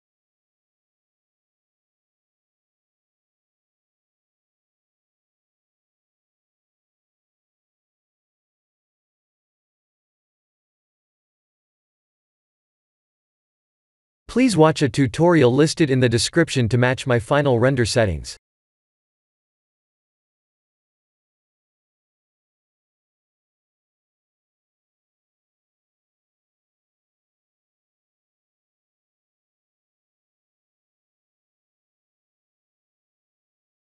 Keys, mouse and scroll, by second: 2.9 click, 5.2 KP_0, 7.9 click, 8.5 click, 13.8 click, 18.3 click, 19.4 click, 25.9 click.